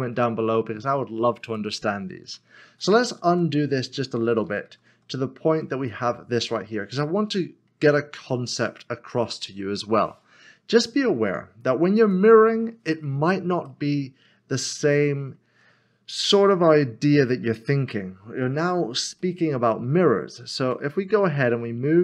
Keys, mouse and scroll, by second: 1.4 click, 2.7 ctrl+z, 5.9 middle click, 8.3 scroll down 1, 11.3 Tab, 12.0 click, 13.8 middle click, 19.2 middle click.